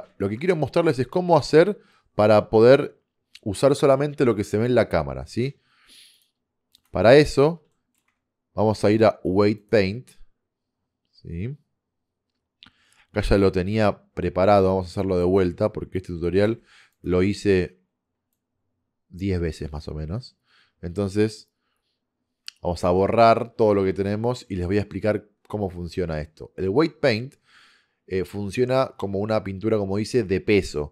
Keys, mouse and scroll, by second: 0.3 KP_0, 6.4 click, 7.9 middle click, 9.0 click, 13.8 t, 15.1 click, 16.5 f, 17.1 click.